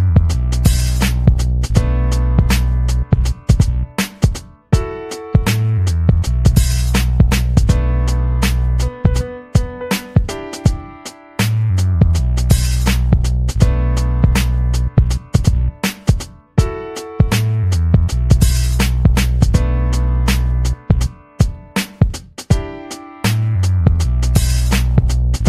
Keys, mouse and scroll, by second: 1.2 click, 2.0 click, 2.8 click, 3.8 click, 4.7-6.5 drag, 6.7 BackSpace, 8.4 click, 10.1-11.4 typing, 13.2 click, 14.8-16.7 drag, 17.7 click, 18.2-20.8 drag, 21.4-22.4 drag, 23.2-25.4 drag.